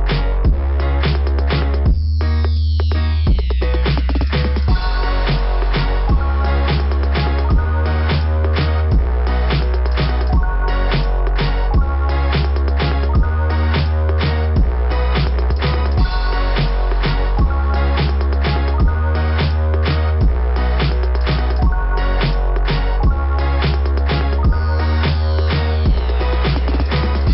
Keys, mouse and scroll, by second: 2.6 click, 2.9 click, 3.0 click, 3.2 click, 10.4 click, 14.5 click, 14.7 click, 15.1 click, 15.4 click, 15.7 click, 19.2 click, 19.5 click, 19.8 click, 20.2 click, 20.5 click, 20.8 click, 21.1 click, 21.4 click, 21.6 click, 21.7 click, 21.9 click, 22.0 click, 22.2 click, 25.3 scroll up 2.